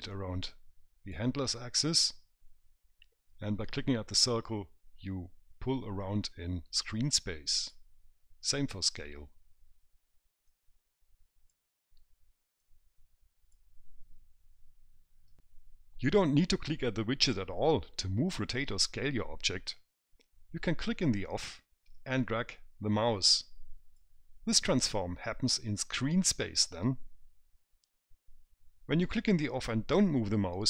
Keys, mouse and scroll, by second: 0.4 click, 4.5 click, 9.2 click, 10.8 click, 12.9 click, 22.3 click.